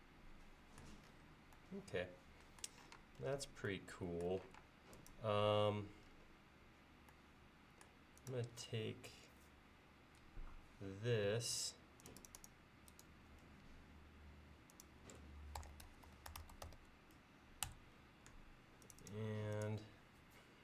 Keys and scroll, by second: 3.0 space, 4.6 space, 15.4-17.2 typing, 17.7 Return.